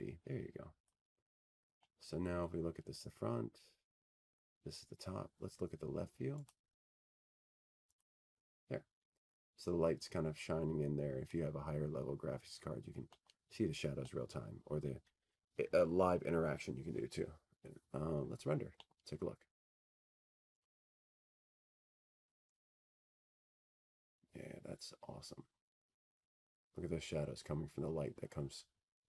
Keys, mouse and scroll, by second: 3.0 click, 4.0 click, 6.4 click, 7.4 click, 7.4-8.1 scroll, 8.1-9.4 scroll, 9.5 middle click, 10.4 middle click, 10.5 middle click, 10.6 middle click, 12.1 click, 13.8 click, 16.8 click, 18.9 middle click, 19.9 middle click, 24.5 middle click, 26.2 click, 28.1 click.